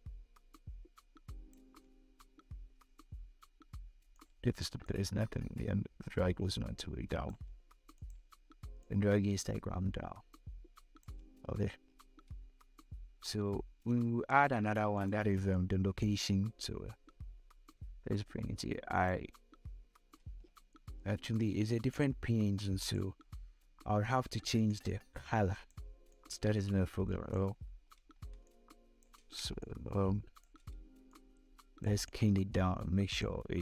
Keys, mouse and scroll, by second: 3.6 click, 4.4 shift+click, 8.4 shift+click, 10.9 scroll down 1, 11.5 scroll up 1, 14.6-19.7 drag, 19.7 scroll down 1, 21.4-22.8 drag, 22.8 scroll up 1, 24.3-27.1 drag, 27.1 scroll up 1, 28.0 space, 28.1 click, 28.5 space, 29.2 click, 29.8 space, 30.6-33.6 drag.